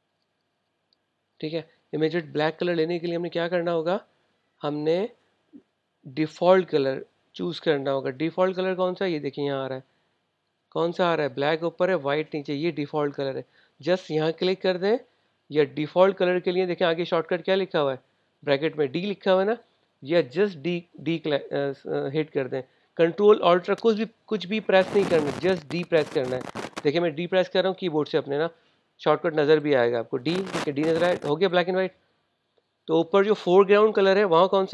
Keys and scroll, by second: 30.1 d.